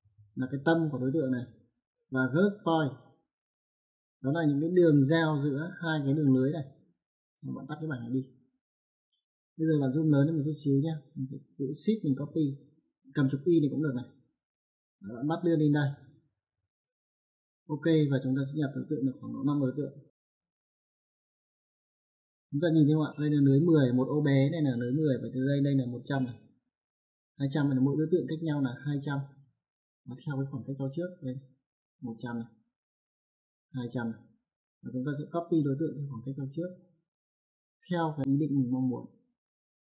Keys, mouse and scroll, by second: 2.5 click, 8.3 click, 14.2 shift+click, 18.5 click, 19.9 shift+5, 21.2 click.